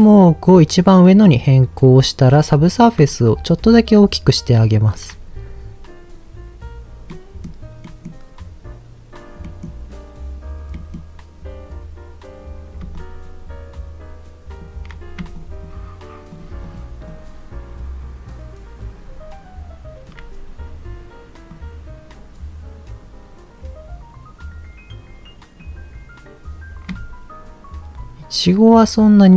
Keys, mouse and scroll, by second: 3.0-4.8 shift+drag, 7.1-7.4 middle drag, 7.8-8.2 middle drag, 8.2-8.6 scroll up 2, 8.9-9.4 scroll up 1, 9.4 middle drag, 10.7 middle click, 11.6-12.8 scroll down 2, 12.9-14.6 shift+drag, 15.4-16.7 shift+drag, 17.1-20.1 shift+drag, 21.5-25.6 drag, 26.8-29.3 shift+drag.